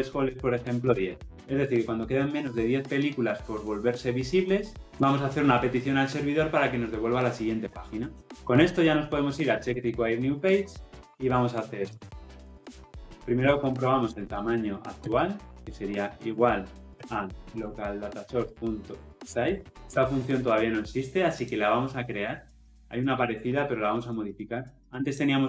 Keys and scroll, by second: 9.5 Tab, 18.2 Return, 23.9 ctrl+b.